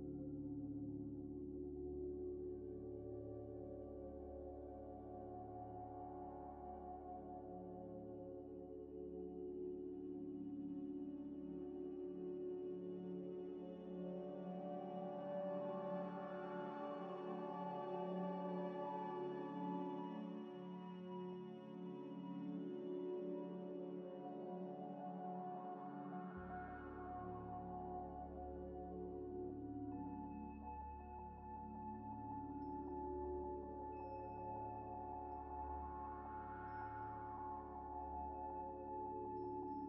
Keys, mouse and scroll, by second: 1.2 ئ, 1.9 middle click, 3.1 ل, 6.8 shift+ي, 6.9 shift+click, 7.0 shift+click, 8.3 shift+click, 9.0-10.2 typing, 12.0 shift+click, 12.5 shift+click, 12.7 ctrl+-, 14.3 ctrl+-, 14.3 shift+ي, 14.4 shift+click, 15.2 click, 15.2 double click, 15.7 s, 16.3 shift+click, 17.2 ctrl+-, 19.9 ء, 21.7 ع, 21.9 shift+click, 22.4 scroll down 2, 22.8 shift+click, 23.1 ع, 23.1 l, 24.3 scroll up 1, 24.6 middle click, 26.2 q, 28.2 q, 28.2 غ, 30.1 double click, 30.1-31.5 typing, 32.7-34.3 typing, 35.6 z, 36.3 scroll up 1, 36.8 scroll down 1, 37.2-39.8 typing, 39.1 scroll up 1.